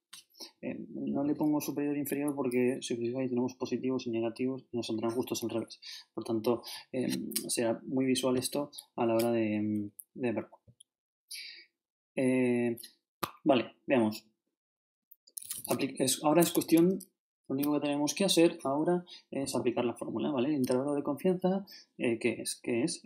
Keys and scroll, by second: 2.4 shift+Right, 9.2 shift+Left, 10.6 shift+Right, 16.5 ctrl+shift+Right.